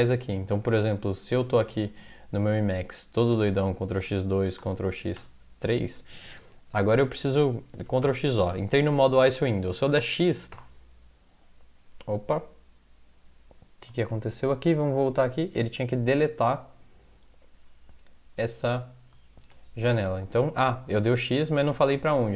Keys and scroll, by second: 0.6 alt+Tab, 3.6 ctrl+x, 4.0 2, 4.6 ctrl+x, 5.2 3, 7.9 ctrl+x, 8.0 o, 10.5 x, 14.1 alt+Tab, 19.5 alt+Tab.